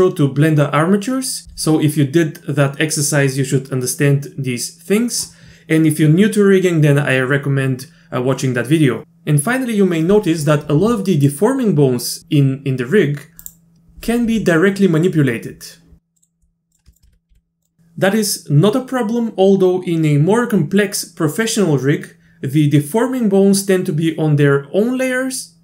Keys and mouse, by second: 11.0 middle drag, 13.4 click, 14.3 r, 16.9 shift+click, 17.1 e, 17.3 r.